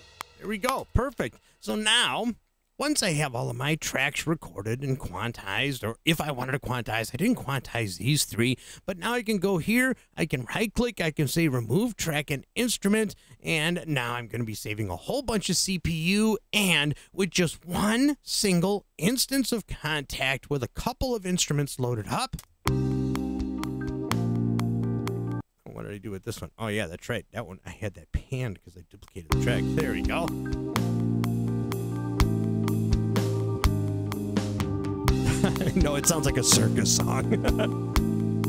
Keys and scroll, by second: 0.8 space, 22.3 space, 25.3 space, 29.0 space.